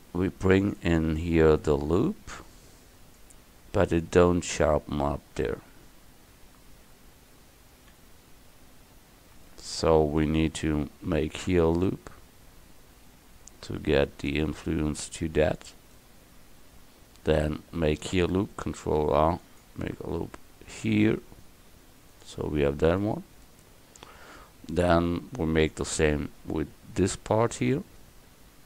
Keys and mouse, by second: 4.6 middle click, 5.2 middle click, 10.8 ctrl+r, 18.8 ctrl+r, 26.1 ctrl+r.